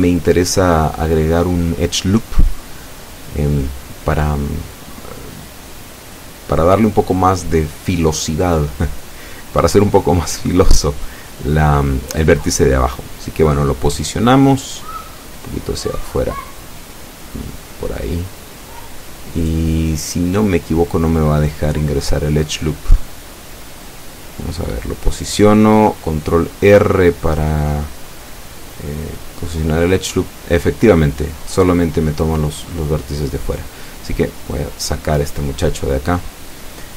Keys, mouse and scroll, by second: 1.7 s, 2.0 z, 5.1 click, 6.7 s, 6.9 x, 8.3 click, 8.7-10.1 middle drag, 11.6 s, 12.0 z, 13.3 click, 16.0 middle click, 17.4-19.1 drag, 20.1 o, 21.0-22.4 drag, 22.8 click, 24.1-25.2 drag, 25.9-27.3 drag, 27.4-28.7 middle drag, 28.8-29.2 scroll up 1, 29.5-30.6 shift+middle drag, 30.6-31.0 shift+scroll up 1.